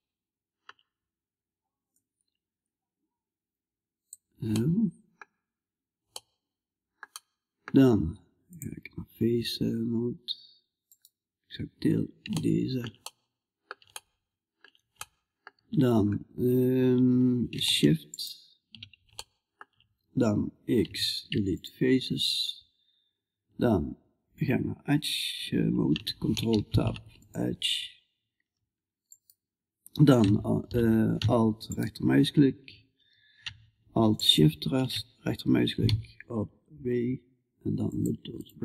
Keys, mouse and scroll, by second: 1.4-3.5 drag, 4.8-7.9 middle drag, 7.9-10.3 drag, 10.3-12.5 right drag, 12.5-26.8 middle drag, 28.5-37.9 right drag, 35.3 w.